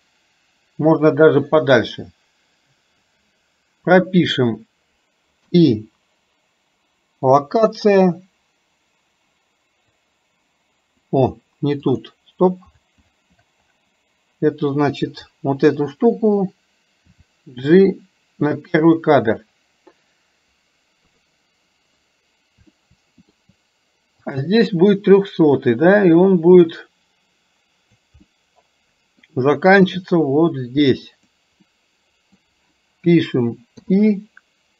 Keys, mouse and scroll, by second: 5.4 i, 10.1 click, 11.9 click, 15.3 click, 22.8 shift+middle click, 24.4 click, 25.6-28.1 drag, 28.3 middle click, 30.1-31.4 drag, 31.7 scroll up 1, 31.8-32.4 middle drag, 32.4 scroll down 1.